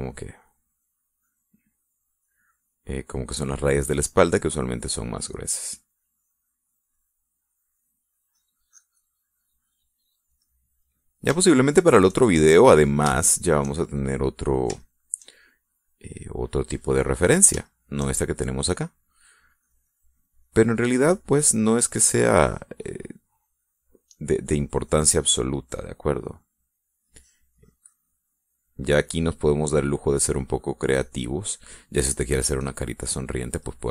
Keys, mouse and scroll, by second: 1.1-2.8 drag, 3.1-4.7 drag, 6.3-8.0 drag, 8.1-9.1 drag, 9.4 click, 10.4 click, 11.6 middle click, 12.6 shift+middle click, 13.7 middle click, 14.4 shift+middle click, 15.3 middle click, 16.0 shift+middle click, 16.6-18.7 shift+middle drag, 18.8 shift+middle click, 20.7-22.7 drag, 25.7-27.1 drag, 27.3-28.3 drag, 28.7-30.0 drag, 31.3-32.8 drag, 33.5 click.